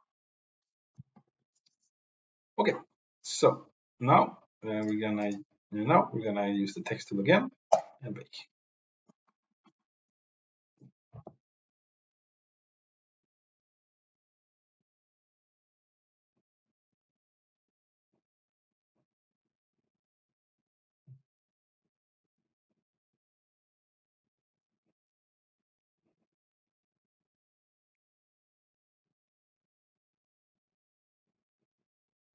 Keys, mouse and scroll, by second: 5.2 click, 7.7-24.6 drag.